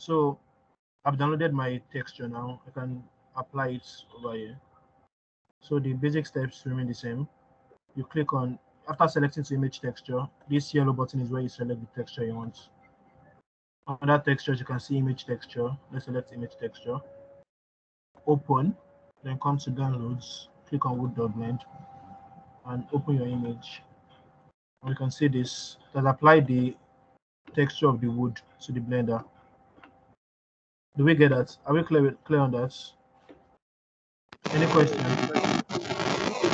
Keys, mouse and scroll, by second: 6.9-16.5 drag, 19.6 click, 25.2-25.6 scroll down 2, 25.6-29.9 scroll up 1, 30.6 middle click, 30.6-35.2 scroll down 1, 35.4-36.5 scroll down 1.